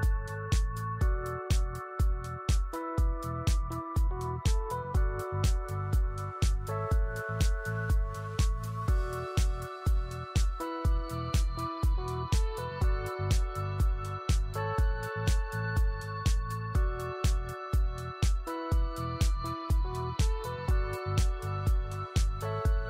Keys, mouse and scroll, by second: 2.8 click, 4.6 BackSpace, 5.1 KP_5, 5.4 KP_Enter, 6.6 click, 8.2 right click, 10.1 click, 11.2 middle click, 12.1 scroll up 1, 12.7 w, 13.0 click, 14.1 middle click, 15.4 click, 15.5 middle click, 16.5 click, 16.9 middle click, 18.2 click.